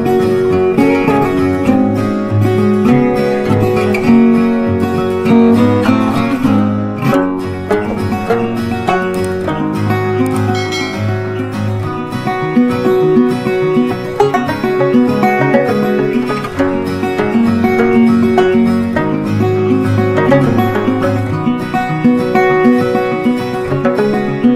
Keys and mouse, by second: 0.2 shift+Page_Down, 0.5 right click, 2.0 click, 6.0-11.8 drag, 12.1 click, 16.7 click, 16.8 click, 19.5 click, 19.5 click.